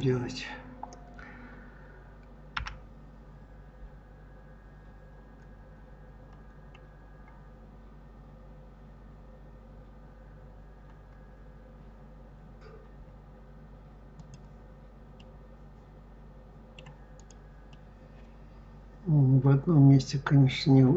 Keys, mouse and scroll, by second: 2.4 g, 15.0-17.0 middle drag, 17.0 click, 17.5-20.6 middle drag.